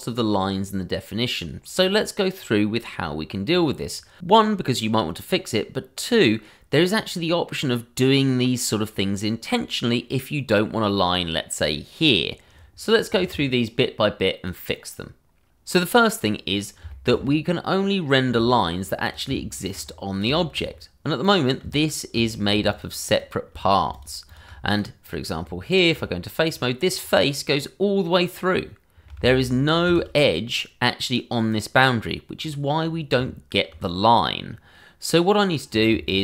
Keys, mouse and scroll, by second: 15.2 click, 16.2-16.8 scroll up 1, 16.9 shift+middle click, 17.2-17.8 scroll up 1, 17.8 middle click, 18.7 scroll down 1, 19.0 click, 19.3 shift+middle click, 19.4 middle click, 19.5 shift+middle click, 19.8 scroll up 1, 20.3 shift+middle click, 20.5 middle click, 20.6 scroll up 1, 21.2 click, 22.3 scroll down 1, 22.7 shift+click, 23.0 click, 23.9 shift+click, 24.3 shift+double click, 24.7 click, 25.0-25.4 scroll up 1, 25.4 Tab, 26.4 click, 26.9 scroll up 1, 27.3 middle click, 29.2 shift+z, 30.2 middle click, 32.4-32.7 scroll down 1, 33.1 Tab, 33.9-34.4 scroll down 1, 34.4-35.7 scroll up 1, 35.7 click, 36.0 shift+click, 36.1 click.